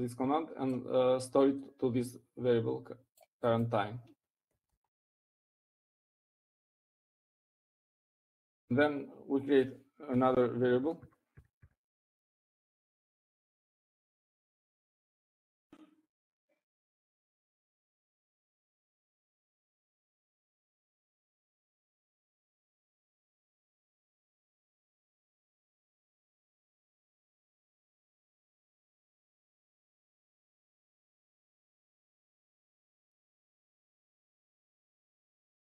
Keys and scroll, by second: 6.2 Right, 6.5 Right, 8.2 Up, 11.3-17.3 typing, 19.3 shift+Left, 20.2 Left, 20.7 Left, 21.4-22.2 typing, 31.3-33.3 typing, 34.7-35.6 typing.